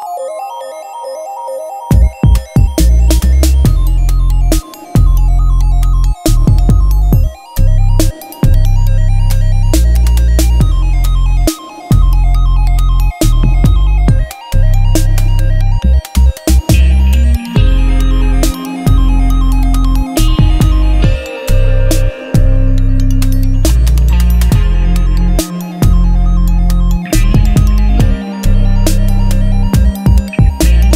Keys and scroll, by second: 0.0-10.9 typing.